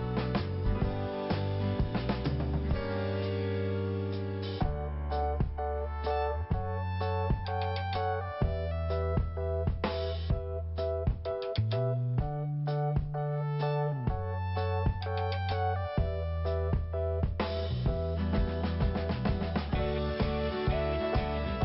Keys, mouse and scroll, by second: 1.7 scroll down 1, 2.7 click, 4.0 middle click, 5.2-5.7 scroll down 2, 5.7 click, 5.8 click, 6.4 click, 6.5 click, 7.4 click, 8.8 scroll up 1, 10.1 click, 10.2 click, 11.8 click, 11.9 click, 12.3 click, 12.3 click, 13.2 click, 14.3 click, 16.0 click, 18.6 scroll down 1.